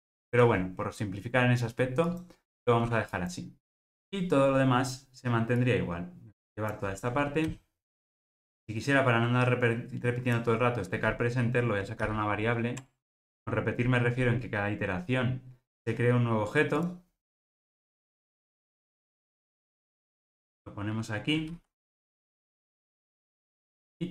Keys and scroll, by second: 12.1 alt+super+v.